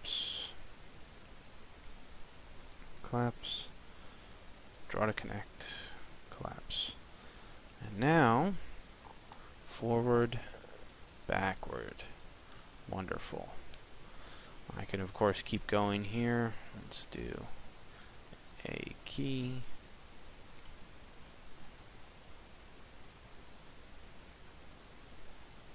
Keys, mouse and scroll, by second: 6.3 click, 6.9 middle click, 8.3 p, 15.3-24.0 click.